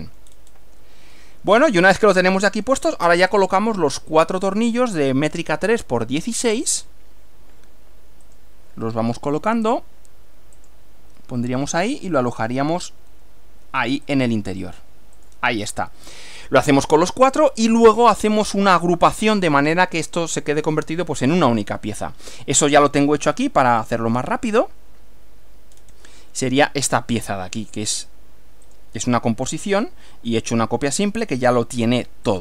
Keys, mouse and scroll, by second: 1.2-3.0 middle drag, 3.2 scroll up 1, 6.6 click, 8.3 click, 10.6 click, 14.1 click, 15.2 click, 15.6 scroll down 2, 22.4 click, 22.8 right click, 23.8 click, 25.8-26.1 scroll down 2, 28.7 click, 31.5 click, 32.3 click.